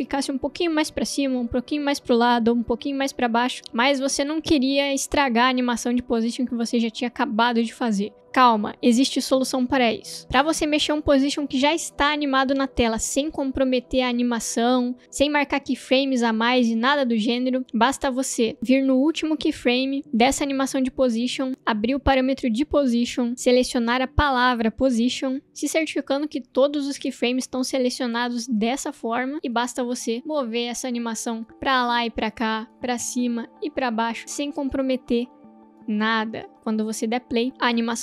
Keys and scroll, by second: 10.5 space, 29.3 v, 36.5 space.